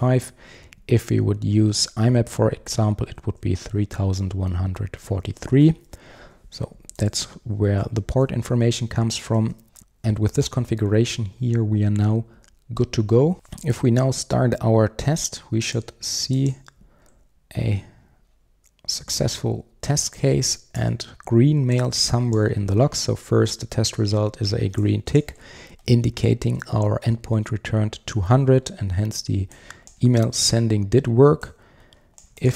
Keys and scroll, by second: 7.1 alt+super+[, 9.4 super+1.